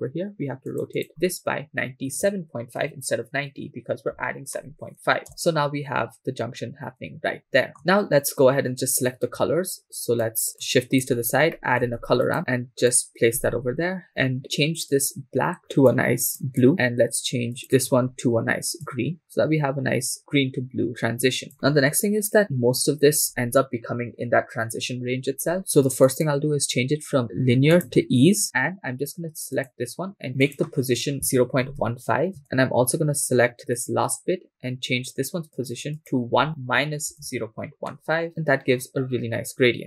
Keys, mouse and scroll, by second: 0.7-5.3 drag, 2.2 BackSpace, 7.5-7.8 scroll down 6, 7.7 shift+middle click, 9.9-10.3 drag, 10.6 click, 11.3 scroll down 2, 11.6 middle click, 12.0 shift+a, 13.6-14.4 scroll up 2, 14.9 click, 17.6 click, 21.5 3, 21.7-22.4 scroll up 2, 22.4-23.6 scroll up 1, 26.1-28.1 drag, 29.6 click, 30.4-32.4 drag, 33.8 click, 35.5-38.3 drag.